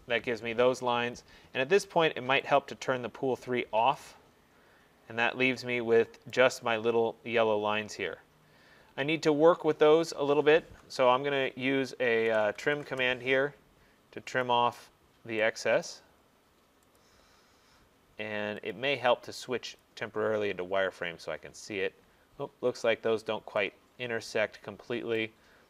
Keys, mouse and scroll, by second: 2.6 click, 3.6-4.3 scroll, 4.3 scroll, 6.4 right click, 6.6-7.6 scroll, 7.8 middle click, 7.9 middle click, 8.7 middle click, 12.3-12.7 typing, 12.9 Return, 14.0 typing, 14.5 click, 15.9 right click, 17.0 click, 18.8 click, 19.9 click, 20.6 middle click, 20.7 middle click, 20.8 middle click, 21.5 middle click, 22.2 middle click, 22.8 middle click, 23.3 middle click, 23.8 middle click, 25.2 right click, 25.4 middle click.